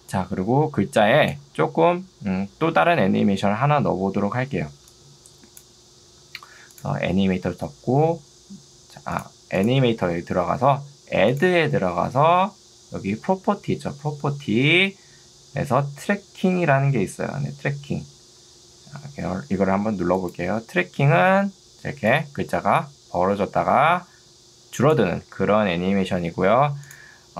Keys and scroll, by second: 25.7 ctrl+z.